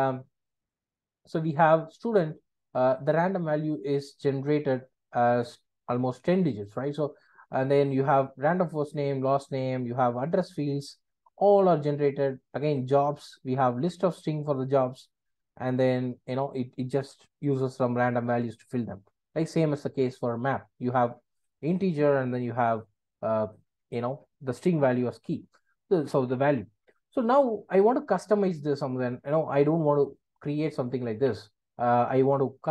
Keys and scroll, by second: 31.2 super+b.